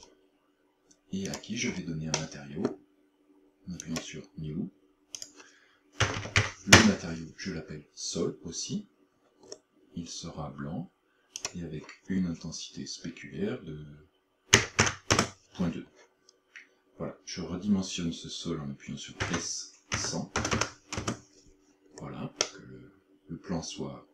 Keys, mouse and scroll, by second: 1.3 click, 1.7-2.2 scroll up 2, 2.2 middle click, 3.8 click, 5.2 click, 9.5-11.2 scroll down 3, 11.2 scroll down 2, 11.4 click, 19.3 s, 22.0-22.5 scroll down 4, 22.5 middle click.